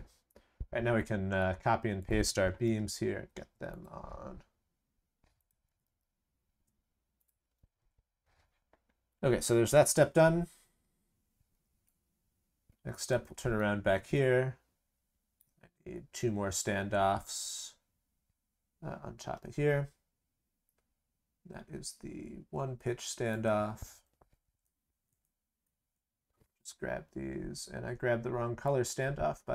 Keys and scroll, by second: 2.4 ctrl+c, 2.6 ctrl+v, 5.6 ctrl+c, 5.8 ctrl+v.